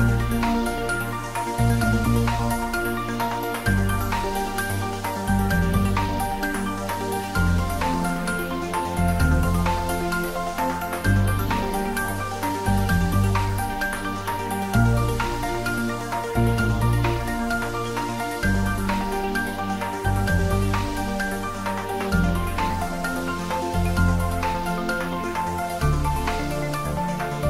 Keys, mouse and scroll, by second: 0.0 9, 0.7 click, 1.1 ctrl+z, 1.3-2.9 typing, 3.5 click, 4.7 g, 12.6 click, 13.6 Tab, 15.3 click, 17.1 scroll down 1, 17.6 scroll up 1, 18.2-18.6 scroll down 1, 18.6 middle click, 19.1 scroll down 1, 20.4-22.6 middle drag, 25.8 click.